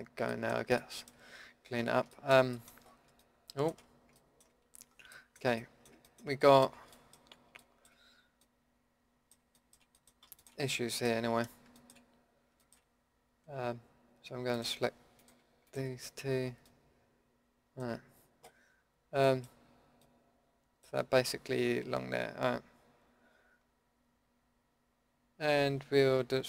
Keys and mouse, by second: 1.8-2.1 drag, 4.8 middle drag, 6.2 middle drag, 7.1-7.8 middle drag, 8.4-10.1 middle drag, 10.5 middle click, 10.6 Tab, 16.6 middle click.